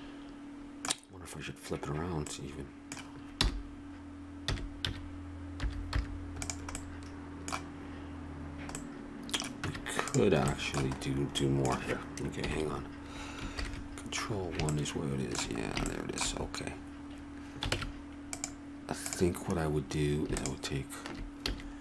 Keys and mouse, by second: 3.3 r, 6.9-8.6 middle drag, 9.1 middle click, 9.6 Tab, 12.4 KP_1, 13.5 ctrl+KP_1, 17.7 ctrl+Tab, 21.4 a.